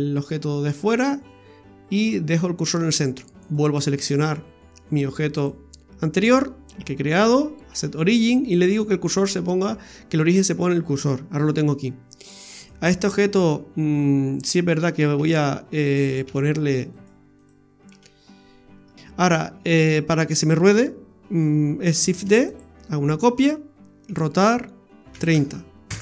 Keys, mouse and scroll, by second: 3.4 right click, 5.4 click, 12.6 right click, 13.2 Tab, 14.3 Tab, 15.2 a, 16.2 f, 16.9 right click, 17.4 right click, 17.9 f, 18.7 Tab, 19.4 right click, 22.1 shift+d, 24.1 r.